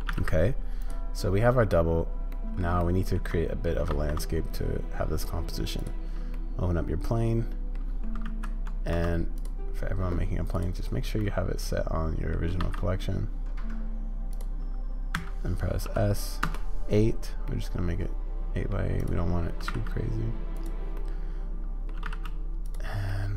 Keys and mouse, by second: 2.3 click, 2.8-3.2 shift+drag, 6.3-7.7 drag, 8.5 ctrl+x, 10.5-12.3 drag, 15.1 s, 17.5-18.4 drag, 18.4-18.7 middle drag, 19.0 click, 21.0-21.9 middle drag, 21.9 g, 23.1-23.3 middle drag.